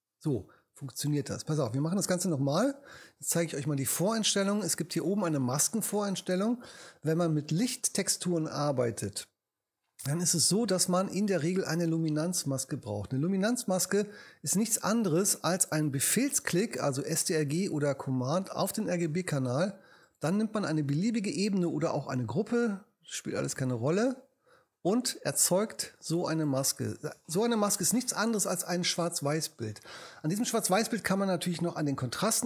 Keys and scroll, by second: 2.0 BackSpace.